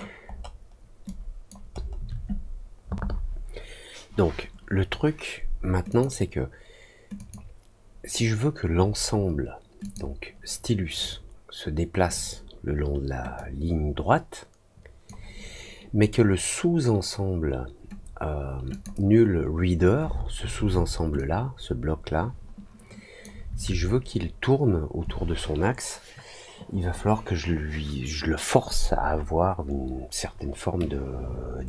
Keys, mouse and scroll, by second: 0.2 alt+scroll down 1, 1.0 alt+click, 1.7 alt+middle click, 5.8 click, 7.1 click, 9.7 click, 13.3-15.0 drag, 18.6 click, 21.1-23.1 drag.